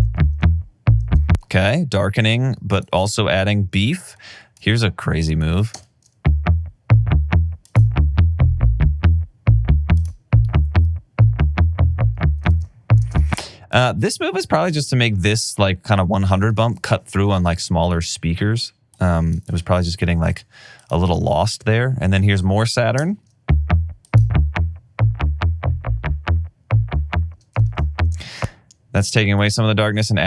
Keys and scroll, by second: 1.1 space, 1.9 alt+super+w, 5.8 space, 12.5 alt+super+w, 13.0 space, 17.0 alt+super+w, 23.0 space, 27.7 alt+super+w, 28.1 space.